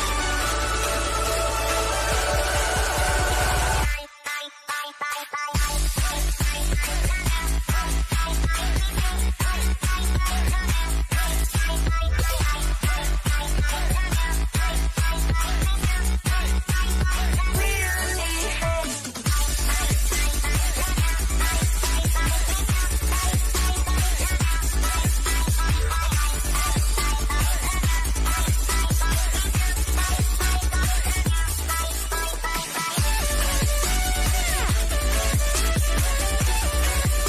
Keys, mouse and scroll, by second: 4.6 click, 8.9-14.2 shift+middle drag, 14.2 click, 18.1 click, 20.5 click, 24.1-26.5 shift+middle drag, 26.5 click, 35.7-37.2 middle drag.